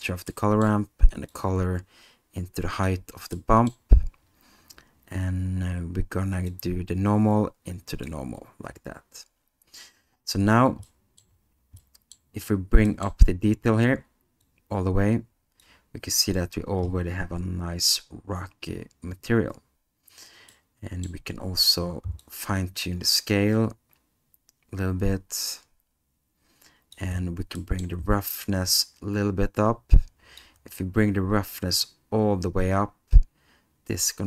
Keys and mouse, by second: 0.4 middle click, 1.3-2.9 drag, 3.4 middle click, 6.5-8.1 drag, 11.0 middle click, 11.9 middle click, 13.0 middle click, 14.4-15.6 drag, 20.6 middle click, 22.3-26.9 drag, 27.6 middle click, 29.0-30.5 drag, 31.9-34.2 drag.